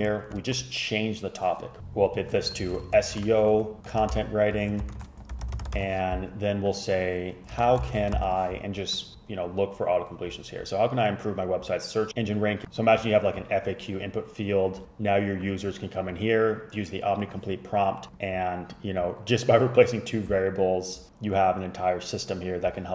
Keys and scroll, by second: 1.8-8.7 typing.